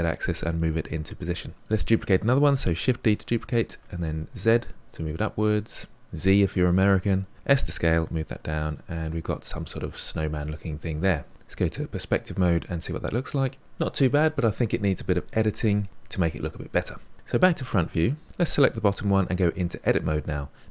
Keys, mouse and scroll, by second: 2.8 shift+d, 7.3 s, 8.2 g, 11.3-13.6 middle drag, 17.4 KP_1, 18.2 click, 19.6 Tab.